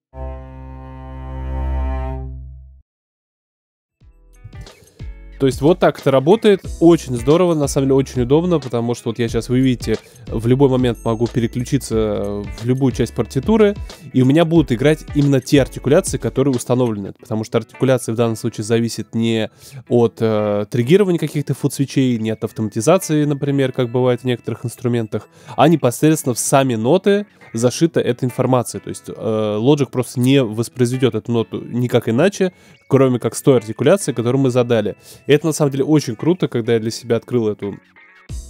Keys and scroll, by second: 2.8 space.